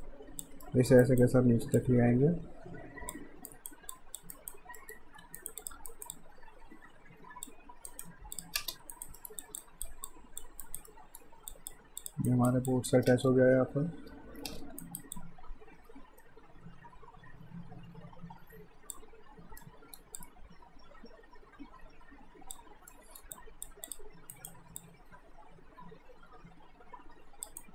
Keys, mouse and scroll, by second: 0.0 click, 0.6 alt+middle click, 1.0 alt+right click, 1.8 click, 3.5 alt+right click, 3.9 alt+click, 4.3 alt+right click, 4.8 alt+middle click, 5.2 q, 5.4 right click, 5.6 click, 5.9 alt+right click, 6.1 alt+click, 7.9 alt+right click, 8.3 click, 8.6 space, 9.0 alt+right click, 9.2 alt+middle click, 9.4 alt+click, 9.6 alt+right click, 10.1 alt+click, 10.6 right click, 10.9 middle click, 11.5 click, 12.3 right click, 12.7 click, 13.1 space, 14.8 alt+right click, 15.2 alt+click, 19.6 alt+middle click, 20.2 alt+click, 22.9 alt+middle click, 23.3 alt+click, 24.3 alt+right click, 24.8 alt+click, 27.6 alt+right click.